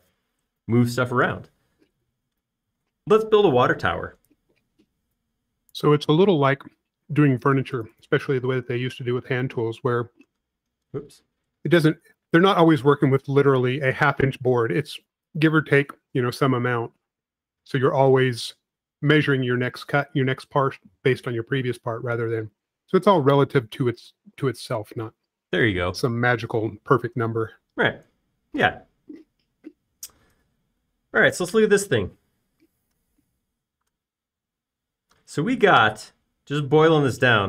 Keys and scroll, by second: 11.2 space.